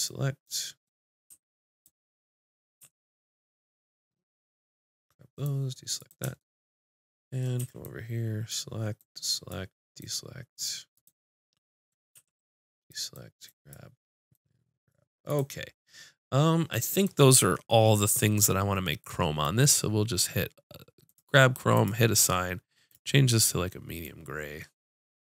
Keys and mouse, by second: 1.8 click, 2.8 c, 7.6 c, 11.0-12.9 drag, 12.1 c, 12.9-15.3 middle drag, 13.2-15.3 drag, 13.2-15.7 right drag, 15.7-17.2 middle drag, 19.5-25.2 drag.